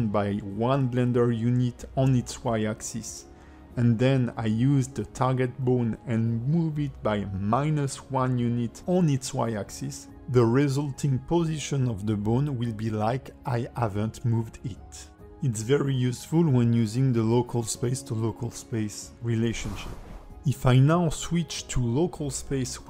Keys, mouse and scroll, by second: 0.7 click, 0.7 g, 3.1 click, 4.0 g, 7.5 alt+middle click, 9.6 click, 13.6 Tab, 14.3 Tab, 14.9 middle click, 16.4 alt+g, 17.0 click, 17.5 alt+g, 20.2 alt+g, 20.2 click, 22.4 click.